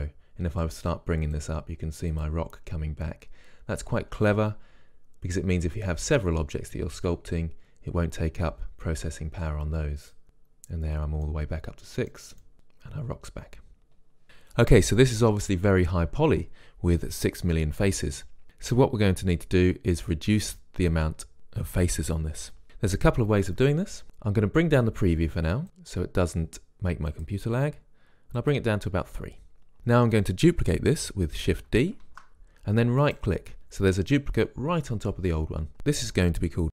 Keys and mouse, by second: 0.0-4.4 drag, 10.3-12.2 drag, 12.2-13.6 middle drag, 25.7-26.8 drag, 27.4-29.8 drag, 29.8-31.7 middle drag, 32.4 shift+d, 33.4-35.5 drag, 35.8-36.7 drag.